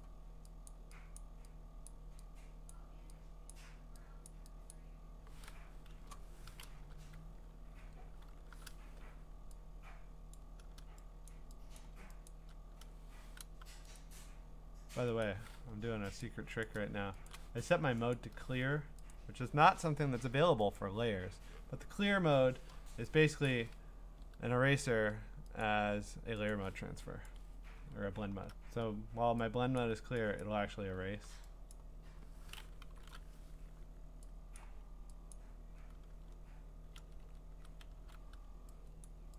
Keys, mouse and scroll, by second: 0.0 click, 0.7 click, 1.2 click, 1.9 click, 2.7 click, 3.5 click, 4.3 click, 4.7 click, 7.0 alt+shift+c, 7.8 alt+shift+o, 8.3 alt+shift+r, 10.3 click, 11.3 click, 11.8 click, 12.3 click, 13.6 u, 14.0 right click, 15.2 click, 16.2 click, 16.6 click, 16.9 Escape, 19.0 click, 19.1 click, 20.8 click, 21.3 Escape, 23.3 scroll, 23.5 click, 25.6 click, 26.5 click, 27.3 click, 27.4 click, 27.9-28.2 scroll, 29.8 click, 30.4 click, 31.2 x, 31.7 click, 32.8 alt+shift+n, 34.6 click, 35.3 click, 37.0 ctrl+z, 37.2 ctrl+z, 37.9 x, 39.0 click.